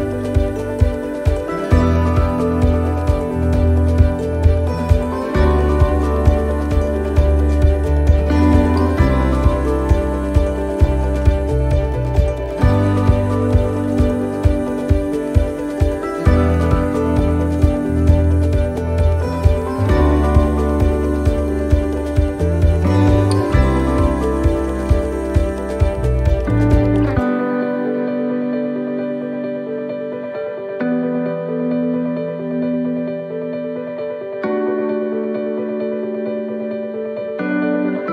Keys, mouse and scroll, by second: 0.2-0.9 scroll, 2.2 right click, 6.2 click, 9.2 click, 11.8 scroll, 13.0 scroll, 14.6 click, 17.2 middle click, 19.5 click, 20.7 middle click, 22.5 click, 24.5 click, 28.0 middle click, 29.8 middle click, 31.5-32.1 scroll, 32.1 middle click, 34.7 click, 36.1 middle click, 36.9 scroll, 37.4 middle click.